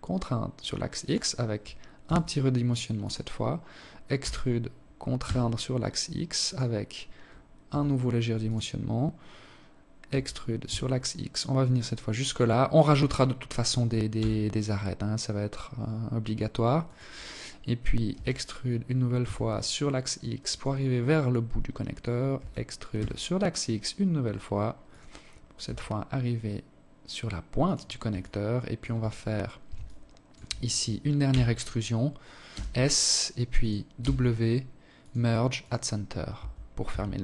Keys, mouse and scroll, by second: 0.8 s, 3.0 e, 6.4 s, 8.8 e, 12.9 s, 16.9 e, 21.1 e, 24.4 s, 27.0 alt+click, 28.0 scroll up 5, 28.6 alt+shift+click, 30.1 e, 32.8 w, 35.2 Tab, 35.7 Tab, 36.4 z, 36.8 Tab.